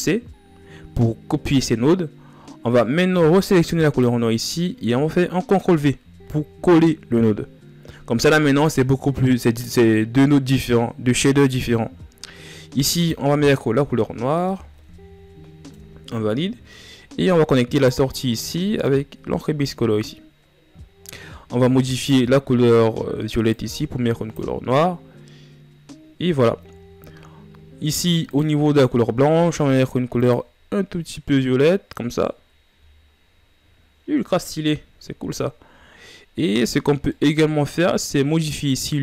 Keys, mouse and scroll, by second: 3.5-5.1 right drag, 5.1 ctrl+v, 7.2 scroll up 3, 15.5-16.7 drag, 17.9 click, 18.5-19.4 drag, 20.1 scroll down 2, 20.9 scroll down 2, 21.2-21.6 scroll up 5, 21.6-22.6 drag, 26.7 scroll down 2, 28.0 scroll up 6, 28.6 click, 32.4 a, 37.2-39.0 middle drag.